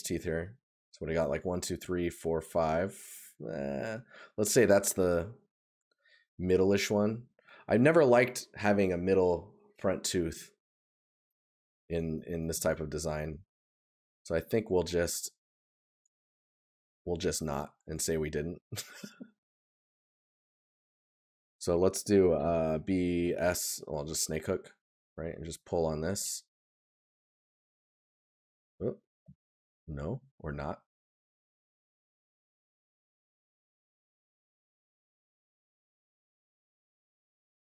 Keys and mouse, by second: 28.7 right click.